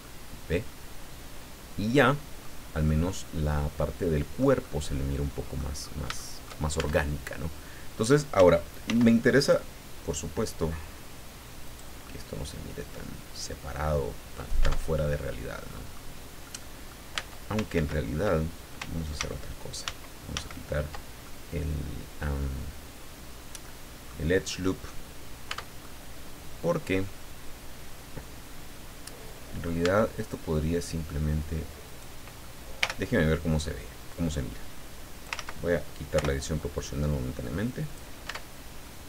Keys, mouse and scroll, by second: 0.0-2.6 drag, 2.8-4.6 drag, 5.8-6.2 scroll up 4, 6.2 shift+middle click, 6.8 shift+Tab, 8.9 ctrl+r, 9.4 ctrl+click, 11.6 click, 12.0-14.5 middle drag, 14.6 Tab, 15.2 middle click, 16.4 middle click, 17.1 Tab, 17.7 ctrl+s, 19.2 ctrl+z, 20.6 ctrl+z, 21.2-24.3 ctrl+middle drag, 25.0 scroll down 1, 25.5 Tab, 25.8-29.8 middle drag, 29.8 Tab, 31.9 right click, 32.8 l, 34.1-35.4 drag, 35.4 ctrl+z, 36.1 o, 36.8-38.1 drag, 38.3 Tab, 38.8-39.0 middle drag.